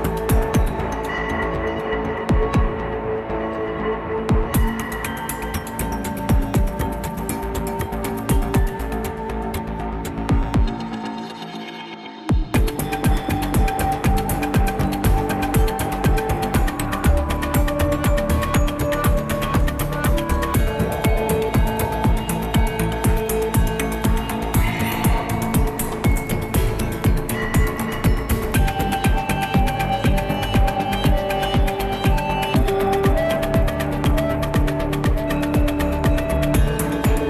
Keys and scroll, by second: 0.0 ctrl+-, 0.1 ctrl+-, 34.8 ctrl+c.